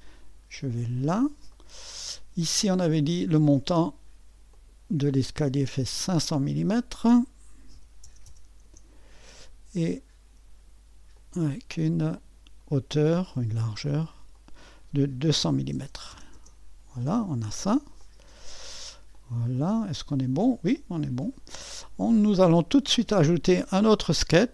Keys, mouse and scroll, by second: 1.5-2.6 middle drag, 2.6-7.7 drag, 7.7 KP_5, 8.0 KP_0, 8.2 KP_0, 8.6 Return, 10.9-11.6 typing, 11.1-15.4 drag, 15.2-16.2 typing, 16.3 Return, 17.7-18.5 typing, 18.0-24.5 drag.